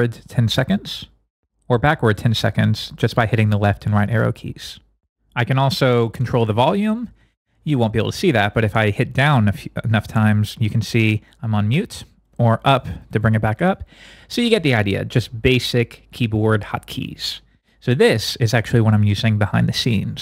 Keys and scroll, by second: 0.7 Right, 1.7 Left, 6.2 Up, 7.3 Down, 11.3 Down, 12.2 Up.